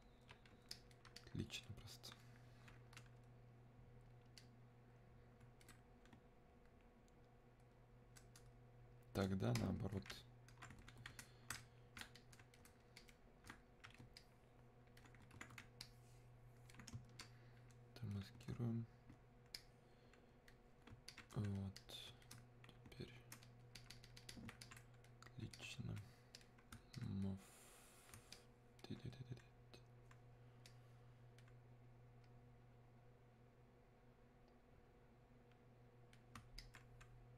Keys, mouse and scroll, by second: 4.4-9.6 drag, 9.6-19.6 ctrl+shift+drag, 19.6-37.3 ctrl+shift+drag.